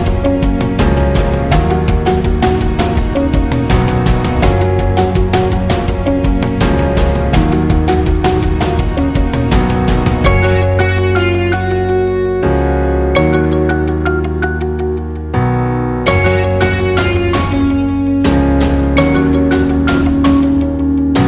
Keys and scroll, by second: 0.7 Delete.